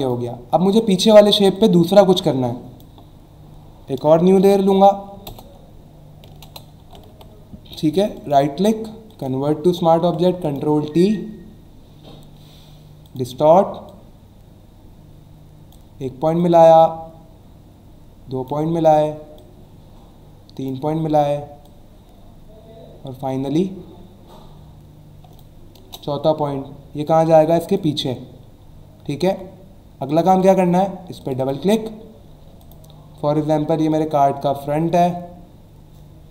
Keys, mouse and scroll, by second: 0.0 click, 0.8 click, 1.5 click, 4.4 ctrl+alt+shift+n, 5.3 alt+BackSpace, 6.4 ctrl+BackSpace, 6.8 ctrl+d, 8.2 right click, 9.1 click, 10.4 right click, 13.0 click, 13.9 click, 16.4 click, 19.4 click, 21.6 click, 25.9 Return, 27.1 click, 28.6 alt+scroll down 1, 29.1-29.4 scroll up 2, 30.1 click, 31.2 click, 32.6 click, 33.9 click.